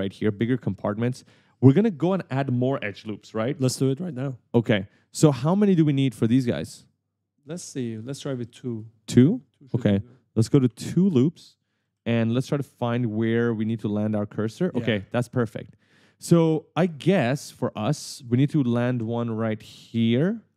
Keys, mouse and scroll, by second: 1.1 right click, 1.1 d, 6.5 click, 8.4 right click, 8.5 d, 8.7 a, 9.9 click, 11.0 click, 11.9 right click, 13.5 right click, 14.8 right click, 18.1 d, 19.0 right click, 20.1 click, 20.4-20.5 typing.